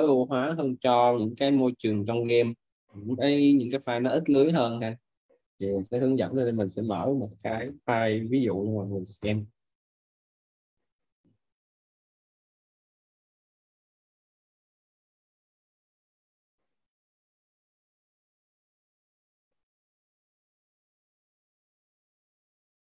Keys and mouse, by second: 12.2 click.